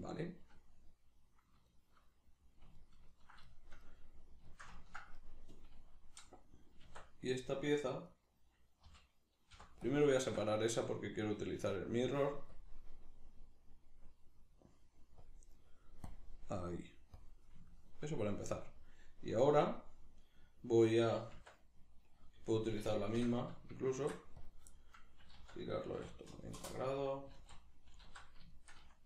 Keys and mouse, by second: 5.2 right click, 6.9 Tab, 8.1 right click, 8.9 l, 10.7 right click, 11.5-12.5 middle drag, 12.5-17.7 drag, 17.7-22.5 shift+middle drag, 21.3 Tab, 22.5 right click, 23.1 l, 23.9 shift+d, 24.5 click, 25.2 r, 27.4 alt+q, 28.5-29.0 shift+middle drag.